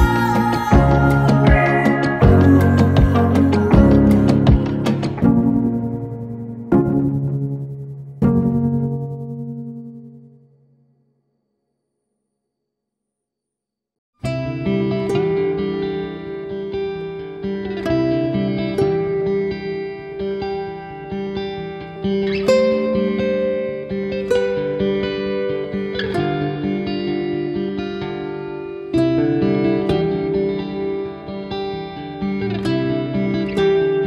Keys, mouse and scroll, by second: 3.8 middle click, 4.3-4.6 scroll down 2, 4.6 KP_7, 5.6 shift+scroll down 1, 5.7 shift+middle click, 5.9-6.7 scroll up 5, 6.3 shift+z, 6.7 shift+middle click, 7.4 r, 9.6 Tab, 10.9 click, 12.3 click, 13.5 Delete, 15.7 Tab, 16.0 middle click, 16.6-17.3 scroll down 4, 16.9 shift+z, 17.4 middle click, 17.5 middle click, 18.4 scroll up 2, 19.9 KP_7, 20.2 g, 22.8 Tab, 23.1 middle click, 23.5 Tab, 23.8 shift+z, 24.0-24.6 scroll down 4, 24.3 Tab, 24.9 Tab, 25.4 shift+z, 25.6 click, 26.0 click, 26.5 click, 26.6 scroll down 3, 26.8 middle click, 30.2 middle click, 30.7-31.3 scroll up 3, 31.4-31.7 scroll up 4, 31.8 middle click.